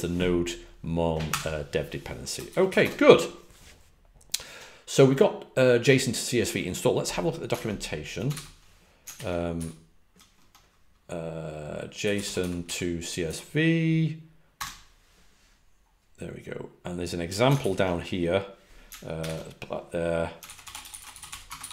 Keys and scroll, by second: 2.8 typing, 7.5 super+Tab, 8.3 super+n, 9.1 ctrl+alt+super+Left, 9.5 alt+super+Right, 11.9-13.1 typing, 13.2 Down, 14.5 typing, 17.5 alt+super+Right, 19.1 alt+super+c, 20.4 super+f, 20.6-21.7 typing.